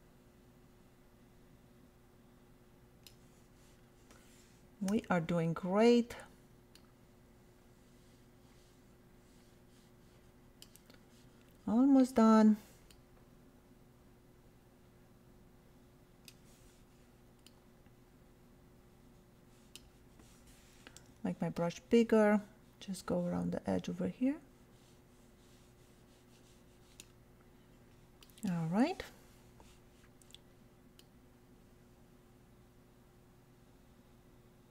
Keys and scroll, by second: 4.9 ], 6.0 [, 21.0 ].